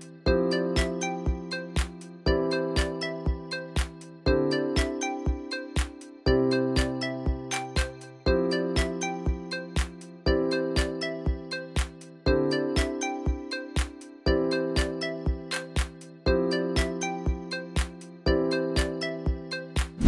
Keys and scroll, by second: 5.1 ctrl+v, 5.3 Return, 6.6 ctrl+v, 6.7 Return, 11.1-12.0 ctrl+z.